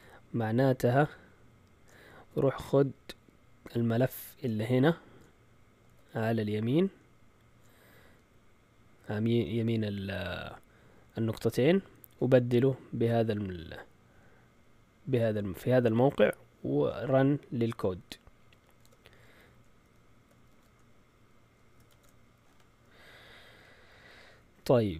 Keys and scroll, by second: 18.8 alt+ش, 20.5 z, 21.9 shift+super+z, 21.9-23.5 typing.